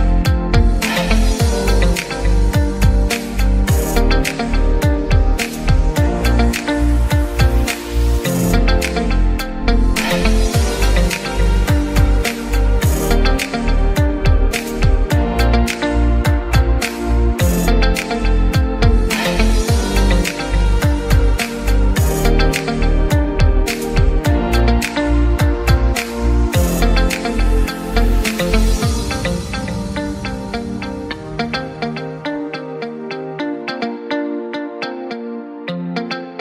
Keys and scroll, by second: 2.7-3.7 typing, 11.1-12.1 typing, 22.7-23.6 typing, 26.3 Escape, 30.1 Escape, 32.5 ctrl+x, 33.8 ctrl+x.